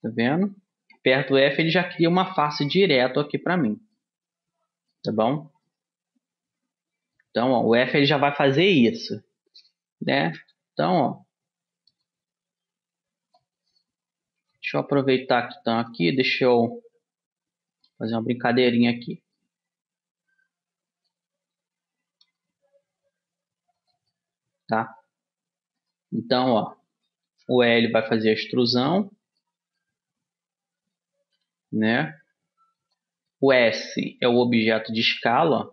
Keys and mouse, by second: 1.4 f, 1.6 click, 1.8 middle click, 2.6 click, 2.7-3.8 right drag, 3.8 click, 4.0-9.8 middle drag, 5.8-7.6 drag, 10.4 r, 12.8-14.5 drag, 14.6 r, 17.0 s, 18.3-19.6 middle drag, 22.4-24.2 middle drag, 22.4 r, 25.8-27.6 middle drag, 27.4 e, 29.2-32.0 middle drag, 31.5 s, 33.4-35.4 middle drag, 34.2 s.